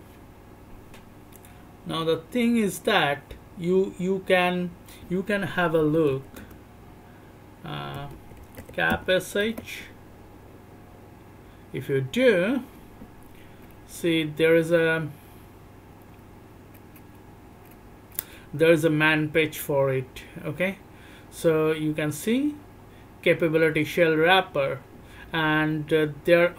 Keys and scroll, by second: 5.7 m, 5.9 m, 6.1 m, 6.3 m, 7.9 m, 8.3 m, 8.5 m, 9.4 Return, 13.7 alt+o, 13.7 b, 14.0 alt+o, 14.0 b, 14.1 alt+o, 14.1 b, 14.8-15.8 alt+o, 14.8 shift+b, 16.3 alt+o, 16.3-22.3 typing, 17.0 alt+o, 17.1 alt+o, 17.3 alt+o, 17.7 alt+o, 18.3 alt+o, 18.9-19.7 alt+o, 19.9 alt+o, 20.9 alt+o, 21.6 alt+o, 21.7 alt+o, 21.7 alt+o, 22.3 alt+o, 23.1 alt+o, 23.3 shift+b, 24.0 alt+o, 24.0 shift+b, 24.9 alt+o, 24.9 shift+b, 26.3 alt+o, 26.3-26.5 typing.